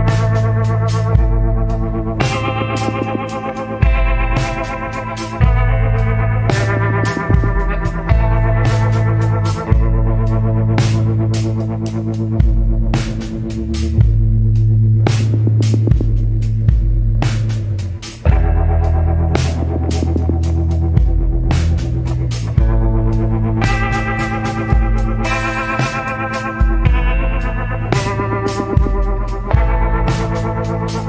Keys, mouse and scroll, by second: 0.6 scroll up 1, 2.6 scroll up 1, 5.4 scroll up 1, 7.8 scroll down 1, 9.1 scroll up 1, 19.5 scroll down 1, 23.3 scroll up 1, 25.1 scroll down 1.